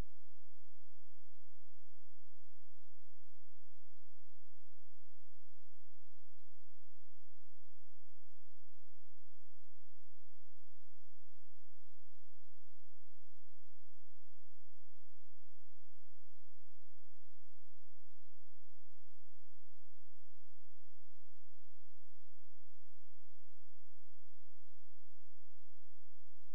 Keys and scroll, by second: 5.9 space, 21.3 space, 22.3 shift+Page_Down.